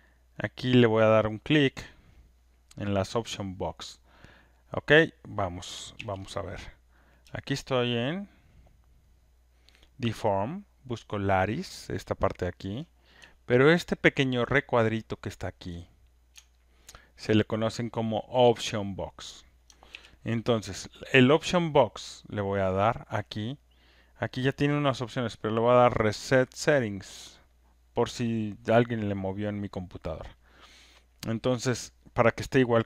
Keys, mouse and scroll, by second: 1.4 click, 3.9 click, 4.9 click, 6.0 ctrl+F1, 6.7 click, 12.6 ctrl+click, 15.7 ctrl+click, 17.3 ctrl+click, 19.9 ctrl+F1, 25.5 click, 27.4 click, 28.4 click.